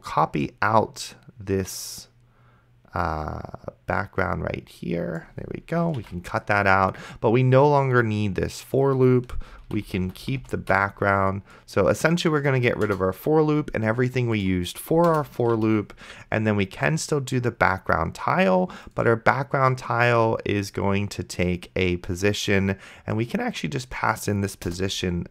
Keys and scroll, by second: 6.3 ctrl+x, 9.9 alt+Up, 12.9 BackSpace, 15.1 Return, 15.8 ctrl+v, 24.9 KP_0.